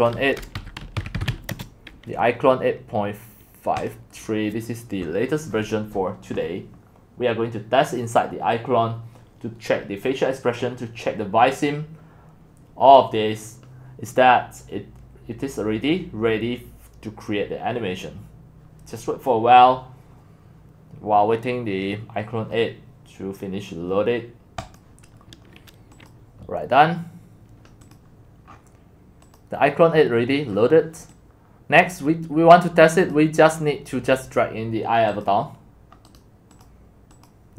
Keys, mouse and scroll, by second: 0.3-1.8 typing, 3.9-5.4 drag, 18.7 click, 22.1 click, 24.8 click, 25.9 click, 27.8 click, 28.5-29.4 scroll down 10, 29.4 click, 29.9-31.7 scroll down 12, 31.7 scroll down 1, 31.8-35.2 drag, 36.5 click, 37.1 click.